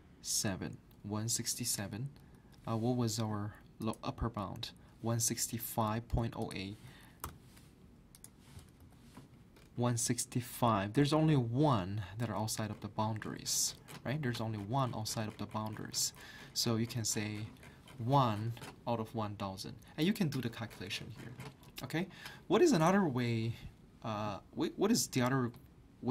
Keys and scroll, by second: 2.2 ctrl+Up, 7.2 ctrl+Down, 7.2 ctrl+Up.